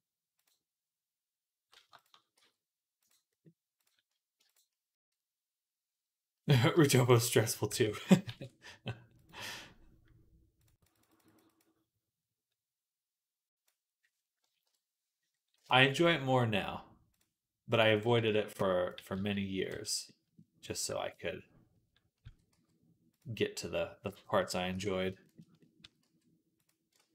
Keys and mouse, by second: 0.3-4.3 middle drag, 2.2 x, 4.3 click, 4.7 middle click, 6.9 shift+click, 7.3 shift+click, 8.1 ctrl+b, 10.4-20.2 drag, 14.5 KP_1, 18.0 b, 18.8 g, 19.5 z, 20.9 middle click, 21.1 middle click, 21.2 middle click, 21.9-25.0 drag, 22.1 s, 25.6 s, 26.8 ctrl+z.